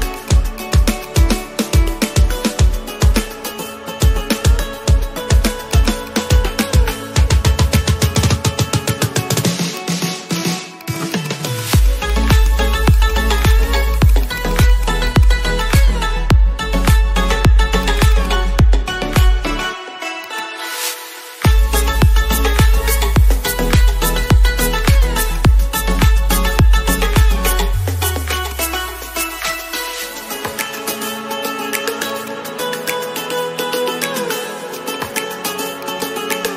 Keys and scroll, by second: 2.9 ctrl+alt+z, 4.7 ctrl+alt+z, 27.2 ctrl+shift+e.